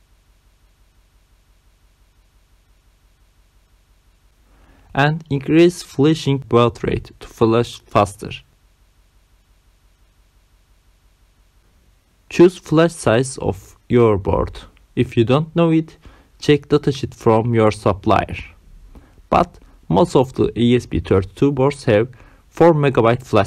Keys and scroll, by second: 1.1 9, 3.3 Return, 7.1 Down, 11.4 Return, 11.9 Down, 12.5 Return, 12.9 Down, 13.8 Return, 14.0 Down, 14.4 Return.